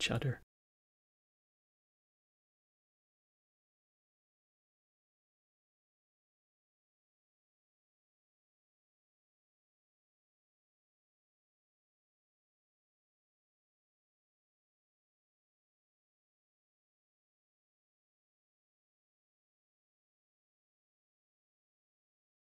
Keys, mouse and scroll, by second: 0.0 click, 1.0 click, 1.2 click, 1.5 shift+d, 1.8 click, 2.8 click, 3.4 click, 4.1 click, 4.4 click, 5.2 click, 6.1 shift+d, 6.4 click, 7.4 click, 7.6 click, 8.2 click, 9.3 click, 10.1 click, 10.9 middle click, 11.1 shift+d, 11.4 click, 12.4-12.8 drag, 13.7 x, 14.0 middle click, 14.3 click, 14.8 alt+middle click, 15.6 click, 15.7-16.3 shift+drag, 16.4 click, 16.7 click, 18.2 KP_0, 18.6 click, 20.1 KP_0, 20.6 click, 21.9 BackSpace, 21.9 BackSpace, 22.3 KP_0.